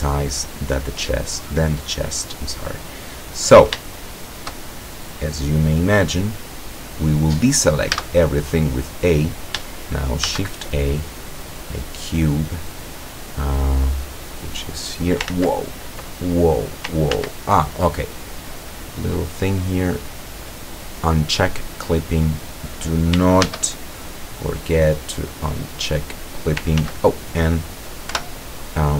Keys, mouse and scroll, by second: 3.9-4.6 shift+middle drag, 6.5-6.9 scroll down 1, 7.0-7.3 scroll up 2, 8.0 a, 10.3 shift+a, 11.7 click, 13.1-13.5 scroll down 2, 14.3-15.3 drag, 15.3 ctrl+z, 16.3-16.6 ctrl+scroll up 3, 17.2 ctrl+z, 19.2 click, 20.4 click, 23.5 shift+a, 24.4 click, 25.4-26.7 drag, 26.9 ctrl+z, 28.2 o.